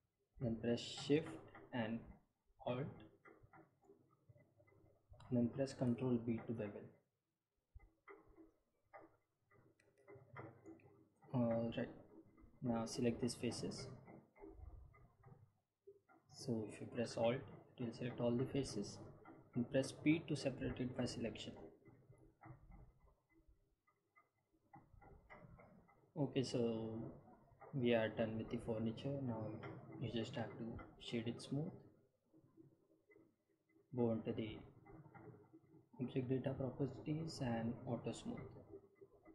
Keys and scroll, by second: 7.8 ctrl+b, 11.7 Tab, 14.6 3, 21.3 p, 23.0 Tab.